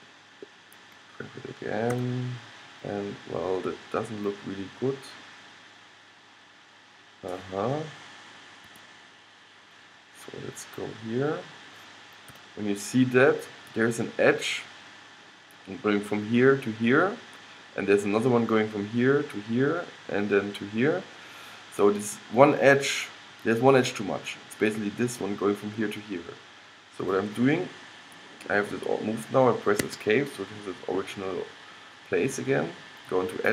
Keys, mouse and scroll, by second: 2.0 g, 10.2-12.8 middle drag, 12.5 g, 33.4-33.5 drag.